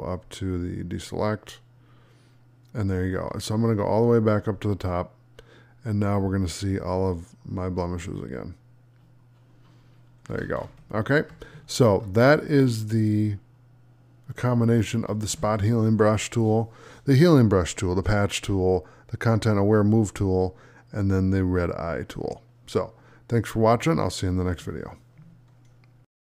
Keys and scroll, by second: 11.4 space.